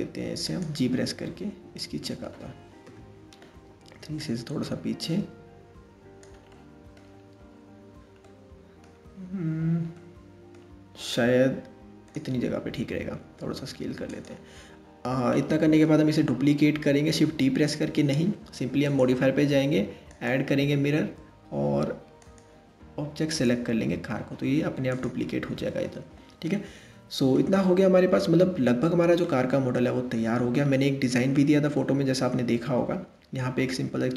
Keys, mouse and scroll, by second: 0.8-1.9 middle drag, 1.9-2.4 scroll up 1, 2.4 KP_3, 3.8 click, 6.1-6.8 middle drag, 6.8-7.8 scroll up 3, 7.8-8.5 middle drag, 8.5-9.6 scroll down 2, 9.6-10.7 middle drag, 10.7 click, 12.9 s, 14.8 scroll up 1, 15.0-15.8 middle drag, 15.8-18.5 scroll down 1, 18.5 click, 19.9-21.6 drag, 21.8 click, 24.5 click, 26.1-27.0 middle drag, 27.0-27.6 scroll down 2, 27.6-28.3 scroll up 1, 28.3-28.8 scroll up 1, 28.8-34.0 middle drag.